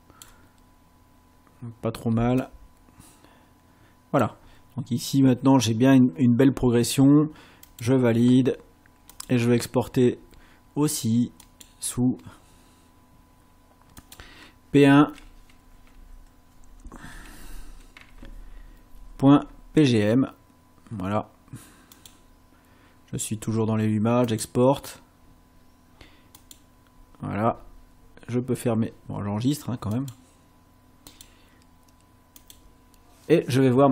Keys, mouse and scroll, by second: 2.5-4.4 drag, 7.7 click, 9.1 click, 11.5 click, 14.0 click, 15.9 Left, 17.1 BackSpace, 18.0 1, 22.0 click, 24.3 click, 26.4 click, 29.9 click, 31.1 click, 32.4 click.